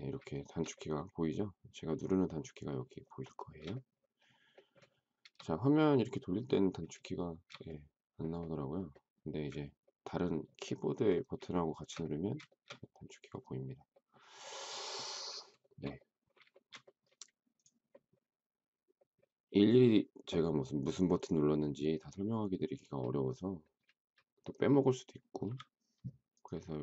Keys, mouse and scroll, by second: 0.3 shift+middle click, 0.5 shift+double middle click, 3.3 shift+middle click, 7.0 shift+middle click, 9.8 ctrl+middle click, 10.6 ctrl+middle click, 11.5 shift+middle click, 12.4 shift+middle click, 12.6 shift+double middle click, 15.6 shift+middle click, 25.4 m.